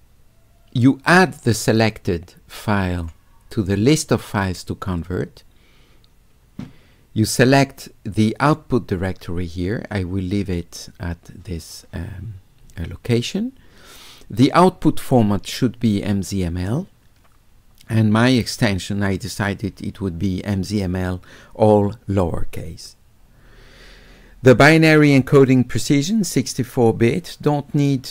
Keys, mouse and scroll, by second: 3.0 click, 9.0 click.